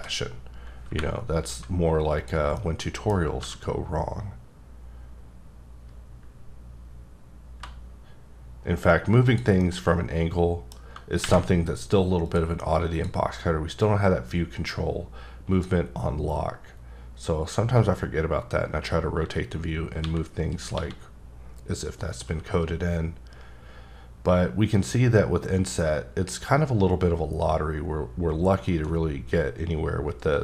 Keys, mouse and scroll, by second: 0.9 y, 2.2 click, 2.6 middle click, 3.4 g, 9.2 click, 9.6 middle click, 10.9-11.2 scroll down 1, 11.6-12.2 scroll down 1, 12.2 click, 12.9 click, 13.8 click, 20.0 x, 20.7 x, 22.2 t.